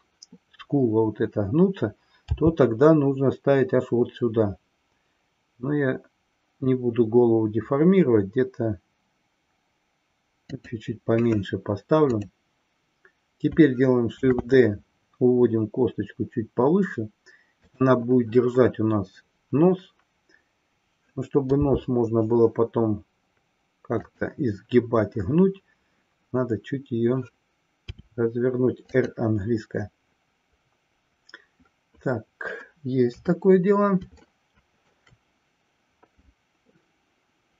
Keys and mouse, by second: 10.4 click, 14.1 shift+d, 29.1 click, 33.0 KP_3, 34.4-35.1 shift+middle drag.